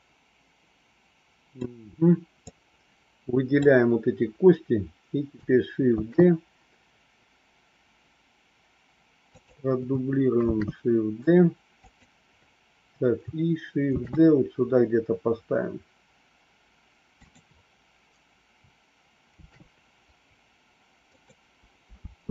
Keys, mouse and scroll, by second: 2.3-3.5 drag, 5.8 shift+d, 10.4 shift+d, 14.0 shift+d, 19.4 shift+d, 22.0 space.